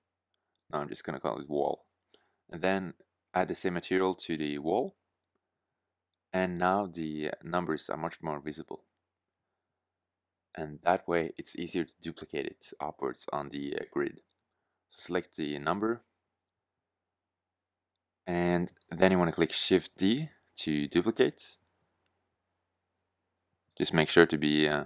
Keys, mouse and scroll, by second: 0.0 l, 8.0 shift+z, 11.3 shift+z.